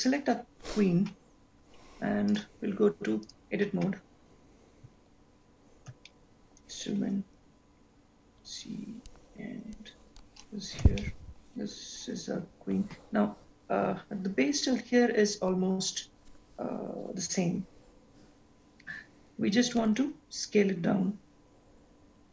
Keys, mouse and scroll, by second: 2.5 click, 5.9 scroll up 1, 6.4-6.9 scroll up 3, 7.0 shift+middle click, 8.3-9.0 scroll down 1, 22.1-22.3 scroll down 2.